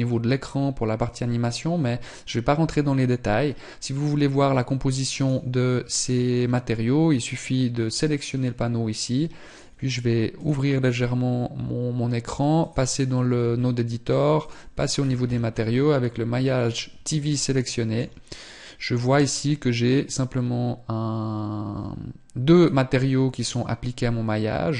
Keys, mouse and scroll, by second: 5.0 right click, 8.3 click, 12.6 click, 15.2-15.9 scroll up 14, 18.1 scroll up 3, 22.4 click.